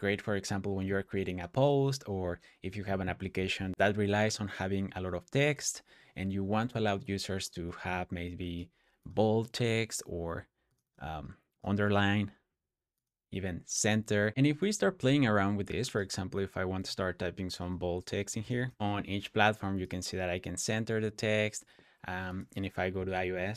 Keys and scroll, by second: 14.3 BackSpace, 18.0-19.0 typing.